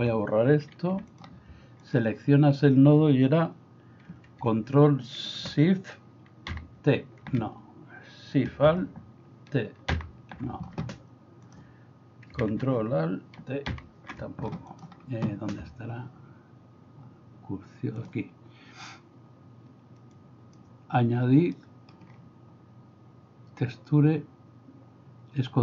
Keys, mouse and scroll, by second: 1.0 x, 1.1 click, 1.8 click, 10.0 alt+shift+t, 13.7 ctrl+alt+t, 14.7 click, 20.2 click, 21.5 middle click.